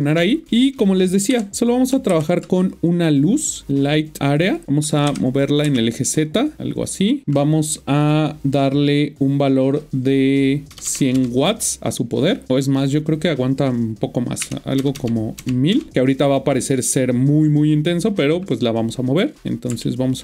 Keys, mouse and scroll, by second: 0.5 middle click, 0.8 scroll down 1, 1.3-2.1 typing, 3.4 click, 5.0 typing, 7.0 click, 10.7-11.1 typing, 12.5 click, 13.2 click, 14.4 Left, 15.0-15.7 typing, 15.7 Return, 19.4 scroll down 1, 19.8 shift+middle click.